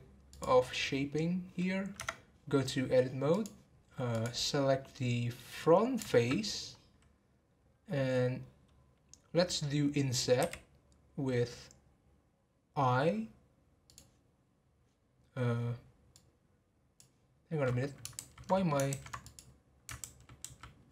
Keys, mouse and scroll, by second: 0.3-1.9 drag, 1.9 Tab, 3.3 click, 4.7 scroll down 2, 4.9-6.6 middle drag, 6.6 scroll up 1, 19.2 click, 20.0 ctrl+z, 20.4 ctrl+z.